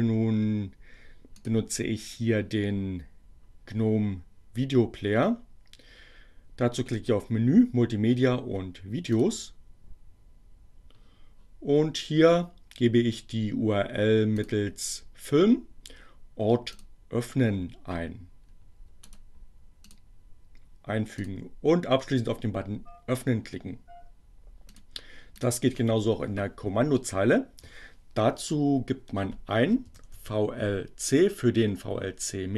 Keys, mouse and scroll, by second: 0.1 click, 7.3-9.4 drag, 12.3-14.7 drag, 16.3 click, 18.7 right click, 19.9 click, 21.2 click, 24.8 click, 25.3 click, 28.1 v, 30.1 l.